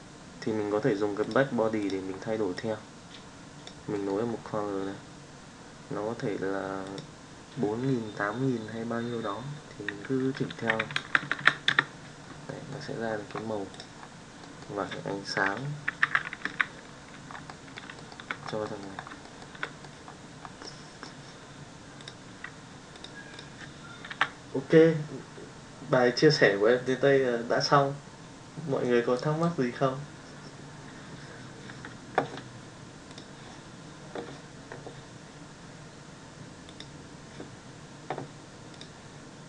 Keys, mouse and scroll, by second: 2.7-3.8 drag, 3.9 middle click, 6.8-11.8 drag, 11.1 KP_0, 12.4 middle drag, 13.7 drag, 14.5 middle click, 16.1 alt+h, 16.6 alt+a, 17.4-17.8 middle drag, 18.6 middle drag, 19.2 shift+middle drag, 19.6 middle drag, 20.6-21.0 middle drag.